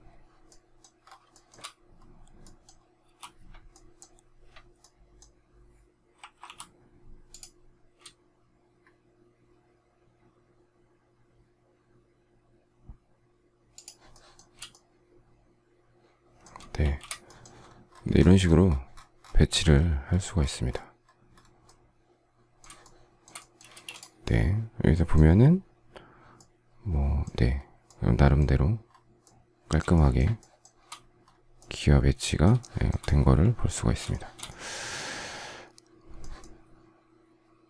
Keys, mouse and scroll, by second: 1.2 shift+middle click, 3.0 m, 6.4 typing, 13.7 shift+click, 14.1 shift+middle click, 16.7 shift+a, 22.7 shift+middle click, 23.6 space, 29.8 shift+middle click, 32.5 shift+middle click, 34.1 shift+middle click.